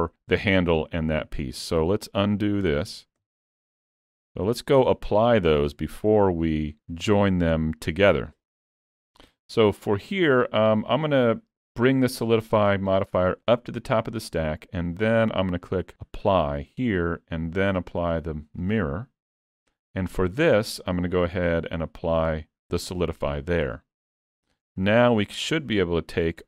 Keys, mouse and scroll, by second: 3.3 ctrl+z, 3.9 ctrl+scroll up 1, 4.4 alt+a, 4.9 scroll down 2, 5.8 Tab, 7.0 click, 8.5 Tab, 8.8 click, 13.0 click, 23.3-23.9 scroll up 2, 23.8 middle click, 24.3-24.7 scroll down 1, 24.8 shift+click.